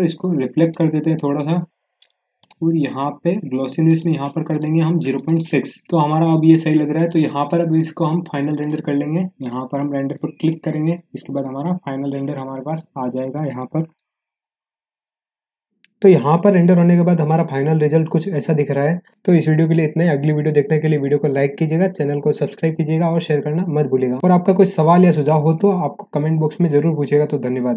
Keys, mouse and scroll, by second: 0.5 click, 7.0 click.